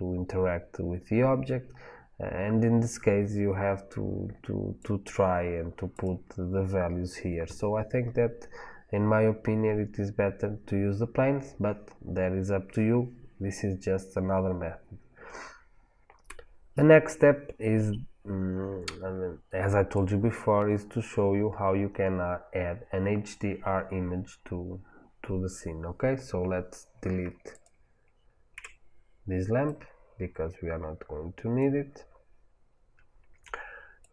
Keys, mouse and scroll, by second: 19.9 click, 20.6-21.3 scroll down 1, 21.3 scroll up 1, 21.7-22.1 scroll down 1, 27.4 click, 28.4 Delete, 29.5-34.1 middle drag, 32.4-34.1 scroll up 2.